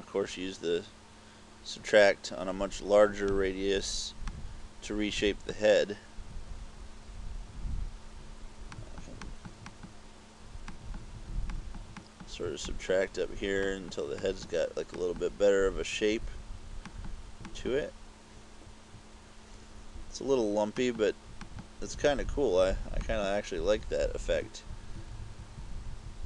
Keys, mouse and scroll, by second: 1.4-2.5 scroll up 1, 4.4 click, 8.8 click, 9.3 click, 9.7 click, 10.7 click, 11.6 click, 12.1 click, 12.7 click, 13.7 click, 14.3 click, 15.0 click, 17.0 click, 17.6 click, 20.9 click, 21.5 click, 23.1 click, 24.4 KP_Add, 24.4-26.2 typing.